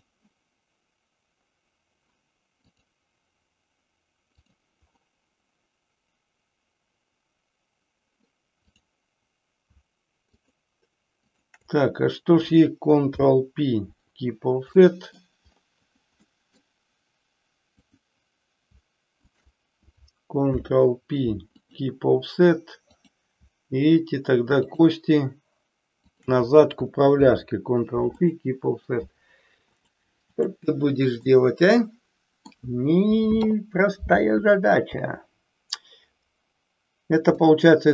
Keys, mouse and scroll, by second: 2.7-4.5 drag, 8.5 click, 10.4 shift+click, 11.3 shift+click, 13.1 ctrl+p, 14.9 middle click, 16.3 middle click, 17.7 click, 19.2 shift+click, 20.5 ctrl+p, 22.9 click, 24.5 shift+click, 26.0 shift+click, 27.2 ctrl+p, 29.7 click, 31.4-32.7 middle drag, 37.3-37.9 middle drag.